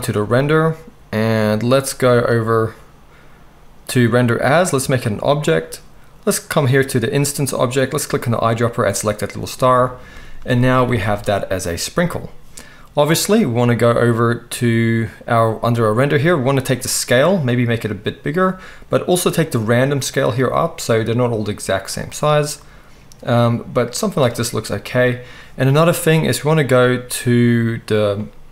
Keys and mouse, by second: 7.7-16.9 middle drag, 10.9 alt+a, 16.9-28.5 drag.